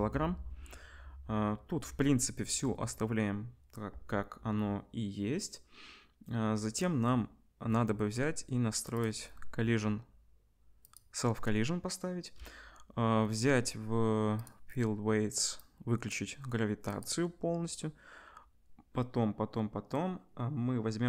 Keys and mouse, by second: 11.0-14.4 middle drag, 14.4-21.0 drag.